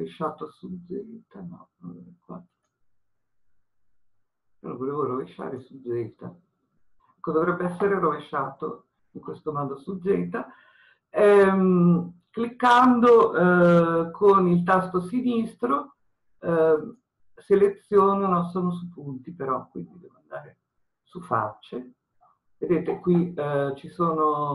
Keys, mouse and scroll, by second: 2.6-3.8 drag, 5.6-7.2 drag, 21.1-24.5 drag.